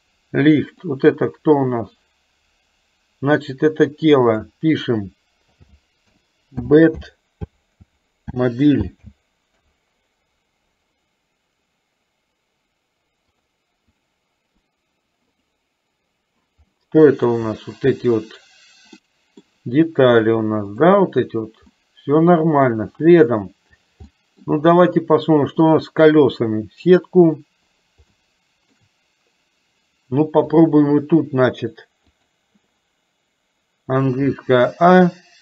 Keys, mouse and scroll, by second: 0.7 click, 4.2 click, 4.4-9.8 drag, 13.4 click, 16.7-19.5 middle drag, 21.9 middle click, 24.1 middle click, 25.7 click, 28.2 shift+middle click, 30.5-32.5 drag, 34.4 a.